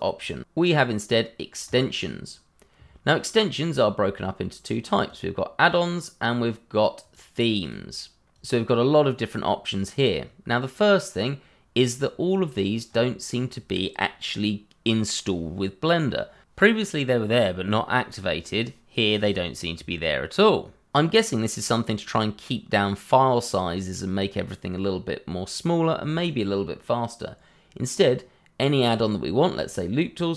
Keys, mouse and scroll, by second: 1.6 click, 5.0 click, 12.1 scroll down 1, 12.8 scroll up 1.